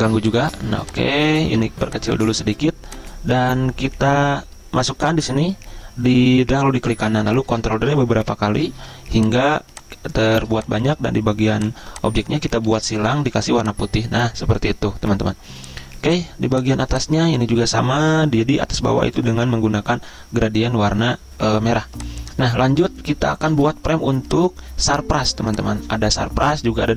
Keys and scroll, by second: 7.5 ctrl+d, 12.7 ctrl+z, 23.5 z.